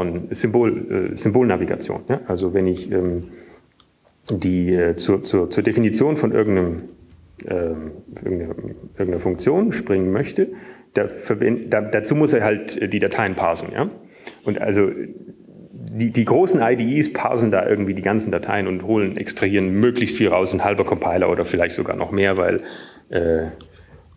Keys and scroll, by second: 1.4 Return, 6.4 Down, 7.7 Down, 11.5 Down, 12.2 Down, 12.7 typing, 14.2-15.5 typing.